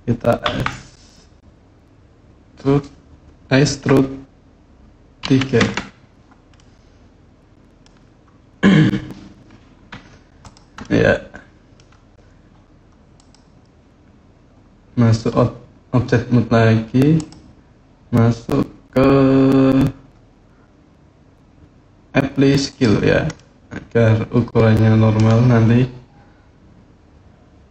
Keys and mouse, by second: 0.2 e, 5.0 KP_3, 5.4 KP_Enter, 6.3-7.6 middle drag, 9.7 Tab, 10.2 middle click, 10.6-11.5 middle drag, 12.9 click, 17.0-22.6 drag, 23.1-24.9 middle drag, 27.5 middle drag.